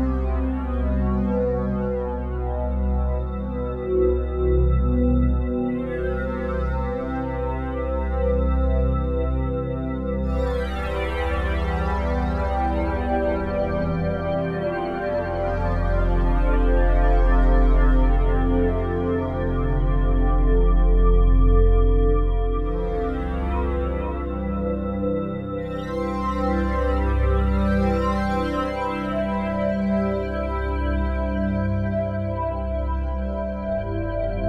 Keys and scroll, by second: 1.7 ctrl+z, 9.3 s, 16.2 F4, 18.6 p, 23.8-26.6 typing, 26.8 Return, 30.0 ctrl+c, 30.3 ctrl+v.